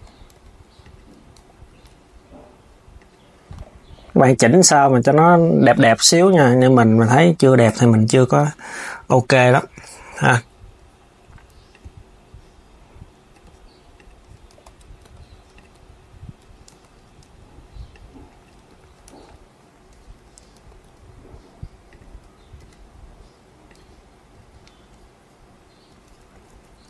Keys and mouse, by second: 0.0 g, 1.1 KP_3, 2.7 click, 4.3 s, 5.4 KP_7, 6.2 r, 7.4 KP_1, 11.4 click, 13.6 click, 14.2 KP_1, 14.7 r, 15.3 KP_3, 16.4 z, 16.9 KP_1, 17.6 click, 18.3 KP_3, 18.8 z, 19.9 KP_1, 20.4 r, 23.5 KP_3, 25.6 Tab, 26.1 s, 26.6 Tab.